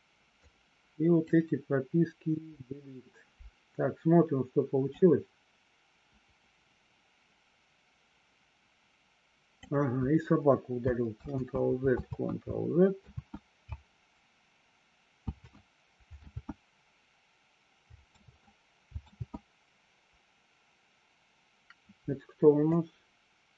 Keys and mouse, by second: 0.4 click, 2.4 Delete, 4.9-9.6 drag, 11.4 ctrl+z, 12.0 ctrl+z, 13.1 ctrl+z, 15.4 ctrl+z, 16.4 ctrl+z, 18.3 ctrl+z, 19.3 ctrl+z, 22.7-23.5 drag.